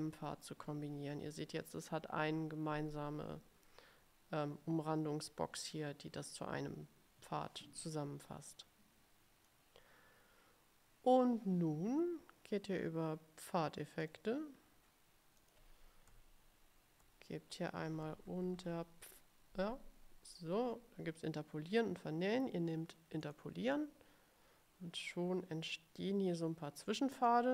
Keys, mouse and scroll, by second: 8.6-9.8 drag, 14.2 click, 15.5 click, 23.3 click, 27.4 click.